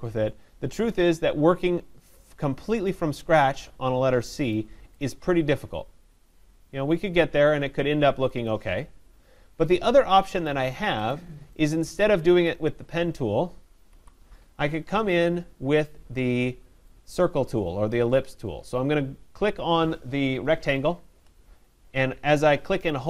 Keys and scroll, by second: 13.9 Delete.